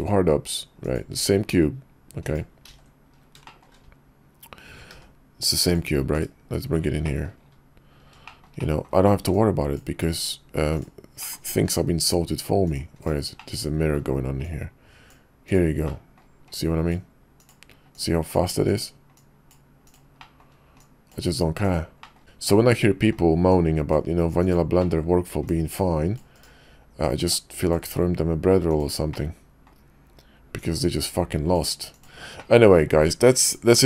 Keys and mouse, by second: 0.8-1.8 ctrl+drag, 2.0-2.4 drag, 2.7 ctrl+v, 4.9 g, 6.1 /, 7.0 click, 8.3 shift+middle drag, 8.6 middle click, 9.3-10.2 drag, 10.7 click, 11.2 middle click, 11.6-12.8 drag, 13.0 right click, 13.3-14.0 middle drag, 14.4-15.5 drag, 15.9 middle click, 16.5-17.5 drag, 17.9-18.8 drag, 19.1-20.0 drag, 20.2 middle drag, 20.8-21.8 drag, 22.0 middle click, 22.5-23.1 middle drag, 23.5-24.6 drag, 24.8 middle click, 25.4-26.5 drag, 27.0-28.8 drag, 29.1-29.7 middle drag, 30.6-32.1 drag, 32.4-33.8 middle drag.